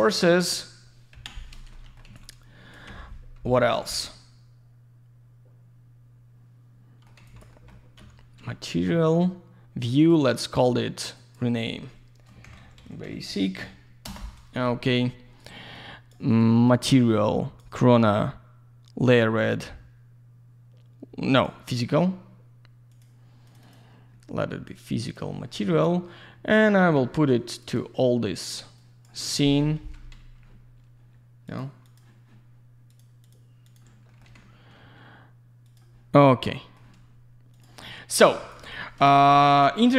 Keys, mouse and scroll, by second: 0.0 middle click, 1.1 Delete, 1.7 alt+middle click, 2.0 alt+z, 2.1 click, 2.8 F4, 4.1 alt+middle click, 7.2 alt+z, 7.2 click, 7.5 alt+middle click, 7.7 double middle click, 10.0 right click, 11.1 click, 12.4 shift+b, 13.6 typing, 14.0 Return, 15.4 right click, 15.7 click, 16.3 right click, 16.6 click, 19.0 click, 22.9 click, 23.4 click, 23.6 click, 24.7 click, 25.0 click, 26.6 middle click, 26.9 ctrl+a, 27.6 click, 28.8 click, 29.3 middle click, 29.6 F4, 30.1 ctrl+a, 31.4 click, 31.8 click, 32.9 click, 33.2 click, 33.6 click, 33.7 double click, 34.1 middle click, 34.2 ctrl+a, 35.6 click, 37.5 click, 37.8 alt+middle click, 38.1 alt+z, 38.3 click, 39.1 alt+middle click.